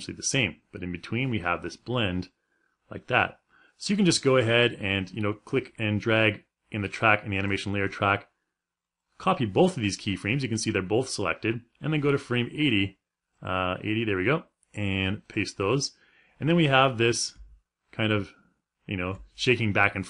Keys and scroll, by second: 16.9 space.